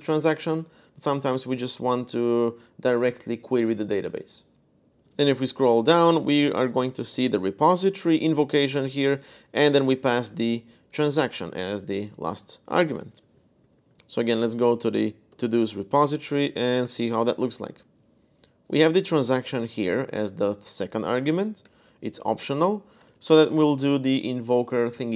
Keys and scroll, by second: 4.9-9.9 typing, 10.6 Escape, 12.7-15.8 typing, 16.3 Up, 16.6 Return, 17.7-19.7 typing, 21.1 h, 21.4 Escape, 22.2 j, 22.8 shift+v.